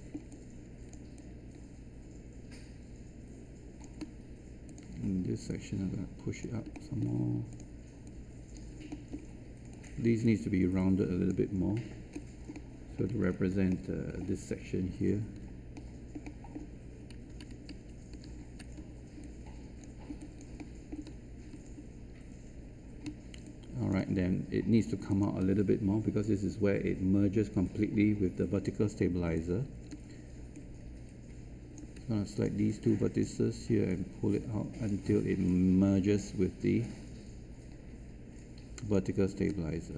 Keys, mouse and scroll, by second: 1.1-3.8 alt+drag, 4.6 click, 6.7 alt+middle click, 7.4 click, 9.0 alt+middle click, 9.7 click, 12.0 scroll down 1, 12.5 alt+middle click, 13.6 middle click, 15.7 middle click, 17.6 ctrl+z, 18.2 ctrl+z, 19.2 alt+click, 20.1 alt+click, 20.5 alt+middle click, 25.0 alt+click, 29.3 alt+click, 30.5-32.0 right drag, 32.3-39.0 drag, 39.8 alt+click.